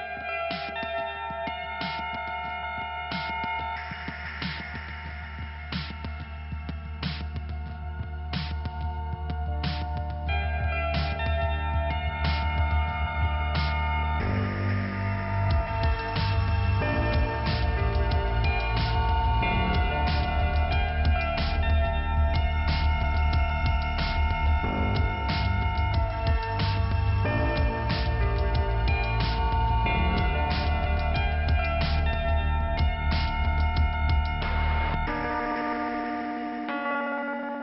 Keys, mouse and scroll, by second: 3.4 click, 7.3 click, 8.7 click, 10.5 click, 12.4 click, 13.1 middle click, 13.7-14.4 scroll down 1, 14.7 click, 16.5 click, 19.9 click, 20.1 click, 24.5 click, 24.7 click, 26.3-27.6 scroll up 1, 27.9 click, 28.8-29.2 scroll down 1, 29.6 scroll up 1, 31.4 click, 33.6 click, 36.4 click, 36.5 click.